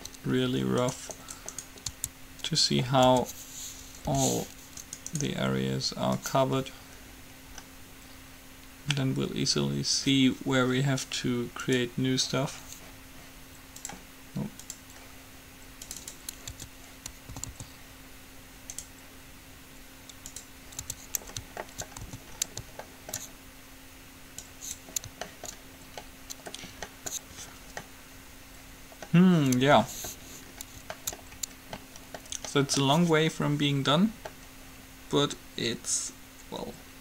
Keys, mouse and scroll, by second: 0.8 middle click, 1.0-2.9 right drag, 2.1 Tab, 3.5 Tab, 4.2 h, 5.0-6.8 right drag, 6.3-8.3 drag, 8.3-10.8 middle drag, 14.2 click, 16.3-18.0 drag, 16.7 Tab, 17.5 a, 17.7 a, 20.7 a, 21.0 Tab, 22.2 a, 24.5-26.5 drag, 26.5-29.0 middle drag, 29.2-36.3 middle drag, 36.9-37.0 middle drag.